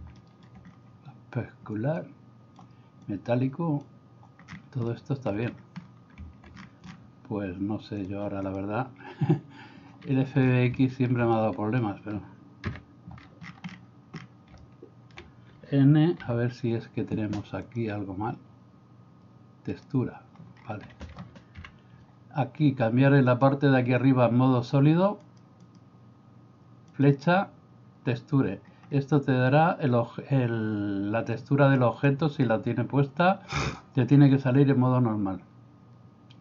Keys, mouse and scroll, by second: 0.2 middle click, 2.0 click, 3.1 click, 4.9 shift+middle click, 6.8 middle click, 8.1 click, 10.9 shift+middle click, 11.4 middle click, 12.7 KP_3, 14.6 middle click, 16.2 n, 17.7-20.4 drag, 21.6 KP_1, 23.4-24.5 drag, 25.3 click, 27.0-30.5 drag, 32.0-36.4 drag.